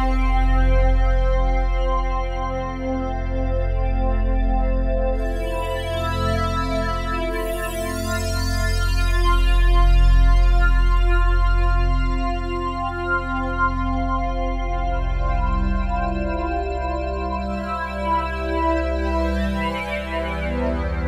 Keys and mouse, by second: 4.0 ctrl+alt+click, 5.4-6.3 typing, 7.9 click, 9.1-16.9 ctrl+alt+drag, 15.5 typing, 17.0-18.2 alt+drag, 18.2 typing.